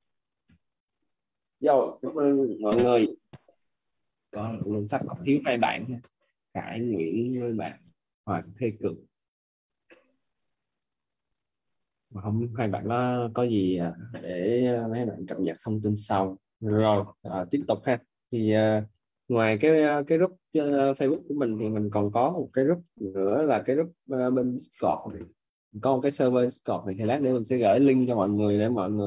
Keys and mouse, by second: 0.0-0.3 typing, 8.7 click, 23.9 click.